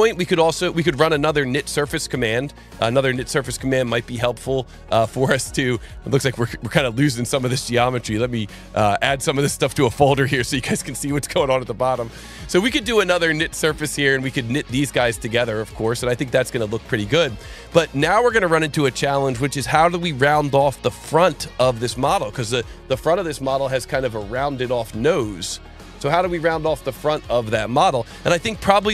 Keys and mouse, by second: 3.1 click, 4.0 click, 5.3 click, 6.8 click, 7.9 shift+click, 8.9 right click, 10.3 click, 11.5 click, 12.1 click, 13.5 click, 14.7 click, 15.9 click, 17.3 click, 18.0 click, 24.5 click, 28.0 click.